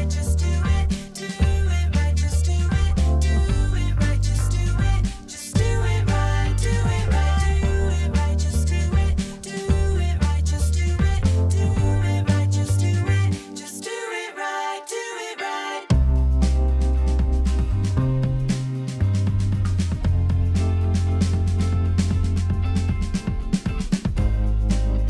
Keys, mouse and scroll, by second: 4.9 ctrl+z, 5.2 ctrl+z, 5.5 ctrl+z, 7.0 ctrl+z.